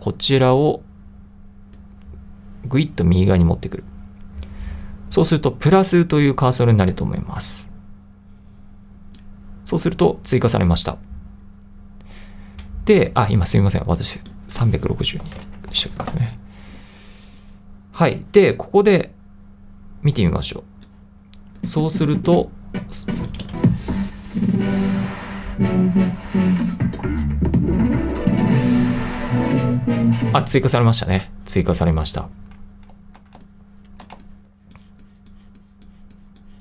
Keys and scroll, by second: 15.0-16.2 typing, 23.5 space, 30.4 space, 32.9 i, 34.2 2.